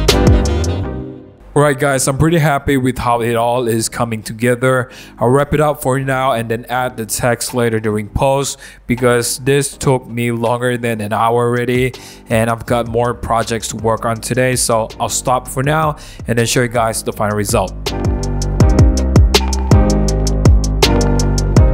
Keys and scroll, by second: 0.2 super+1, 2.9 1, 4.8 BackSpace, 7.3 BackSpace, 12.0 super+0, 12.5 super+-, 12.9 super+-, 13.3 super+-, 13.5 super+-, 15.5 super+1, 18.6 super+0, 18.6 super+-, 18.7-21.7 typing, 20.1 super+=, 20.7 super+d.